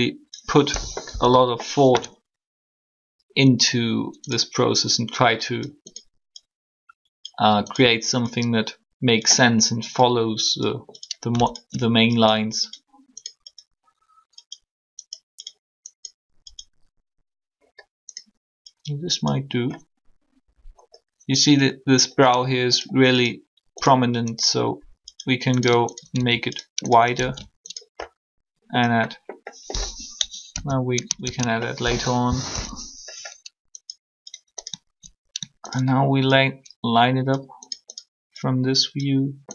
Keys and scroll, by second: 1.1 1, 32.5 ctrl+3.